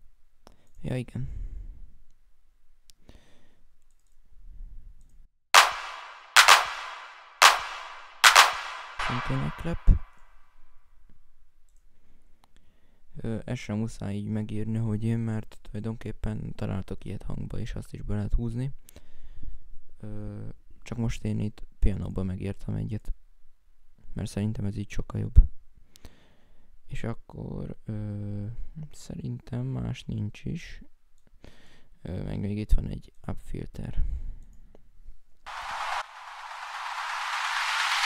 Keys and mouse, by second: 0.5 right click, 4.7 right click, 9.4 F1, 9.4 right click, 9.6 F6, 9.9 F5, 11.0 right click, 11.4 right click, 22.5 F1, 22.8 F5.